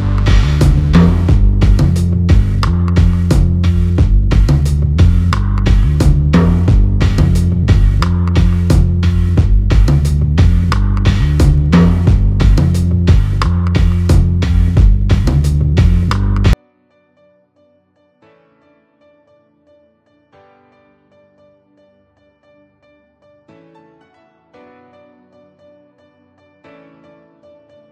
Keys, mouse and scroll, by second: 4.9-6.7 alt+scroll down 32, 7.3-8.6 scroll up 5, 9.1 middle click, 12.9 click, 15.1 KP_1, 16.4 r, 24.3 shift+middle click, 25.2 scroll up 4, 25.9-27.2 scroll up 4, 27.2 g.